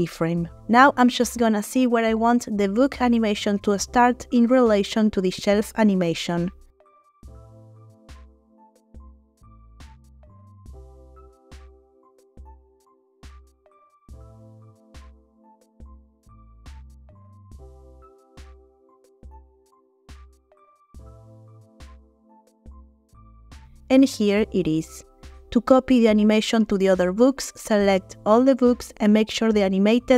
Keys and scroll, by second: 0.2 i, 5.7 g, 7.4 space, 9.6 g, 12.3 space, 15.8 g, 17.3 space, 22.4 g, 23.8 space.